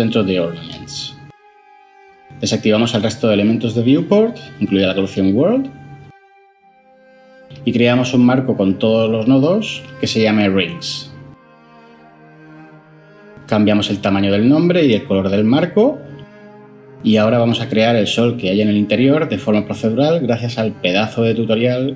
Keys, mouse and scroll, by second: 11.3 ctrl+j, 11.7 F2, 12.1 typing, 12.8 Return.